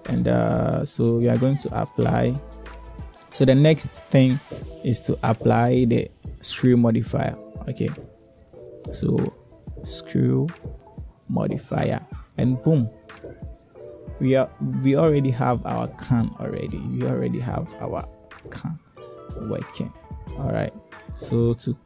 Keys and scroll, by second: 18.0 Tab.